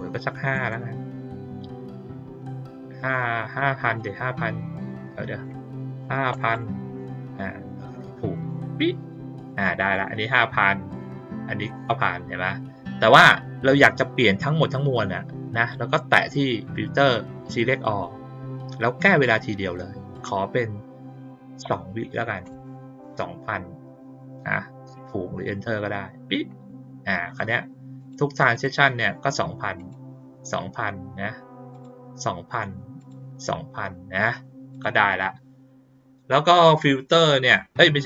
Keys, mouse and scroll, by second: 3.5-3.9 drag, 4.8 click, 8.3 click, 9.3 click, 9.9 click, 10.8 click, 15.5 click, 16.1 click, 17.4 click, 19.1 click, 19.5 click, 25.4 click, 27.2 click, 27.9 click, 28.5 click, 29.7 click, 31.7 click, 32.9 click, 34.7 click.